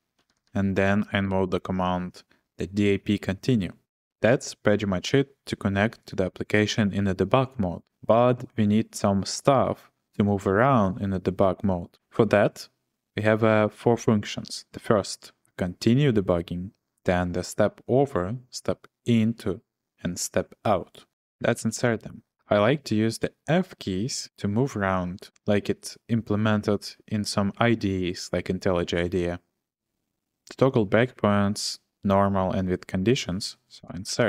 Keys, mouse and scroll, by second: 0.1-2.0 typing, 21.7 ctrl+shift+v, 33.1 i, 34.1 ctrl+shift+v.